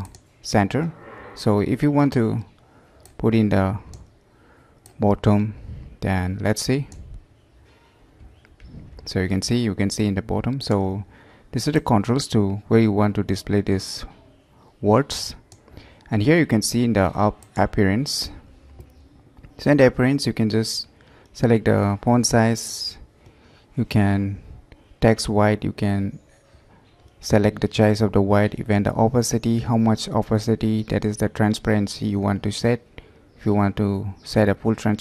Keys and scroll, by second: 12.2 alt+space.